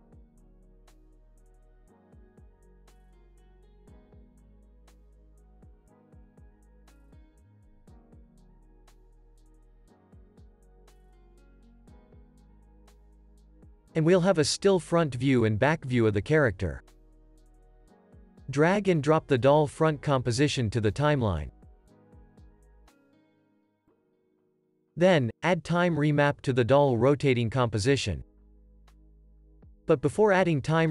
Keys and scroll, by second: 1.8 Delete, 5.9 Delete, 12.3 alt+], 14.2 super+s, 21.5 super+s, 27.3 alt+super+t.